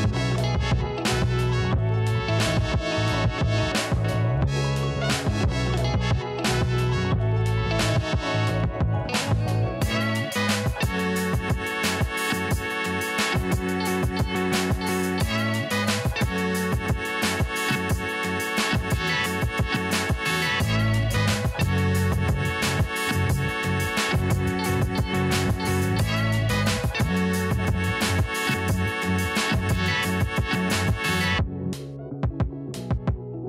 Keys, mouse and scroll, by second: 1.0 click, 1.4 click, 2.1 click, 3.8 click, 4.6 KP_0, 5.0 Return, 7.9-24.9 drag, 27.7 click, 32.7-33.4 drag.